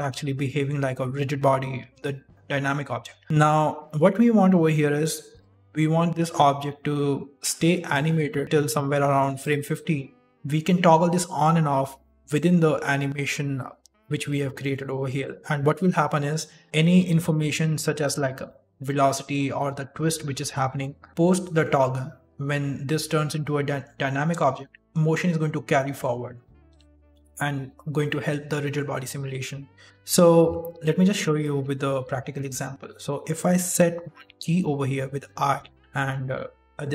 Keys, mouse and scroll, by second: 3.2 middle click, 4.4 click, 7.8 click, 14.2 click, 17.0-20.5 typing, 17.3 click, 18.4 click, 19.7 click, 24.5 shift+middle click, 24.8 click, 24.8 d, 26.6 d, 26.9 shift+middle click, 28.0 middle click, 29.9 ctrl+z, 30.3 ctrl+z, 30.7 ctrl+z, 31.4 shift+middle click, 34.2 i, 35.8 middle click.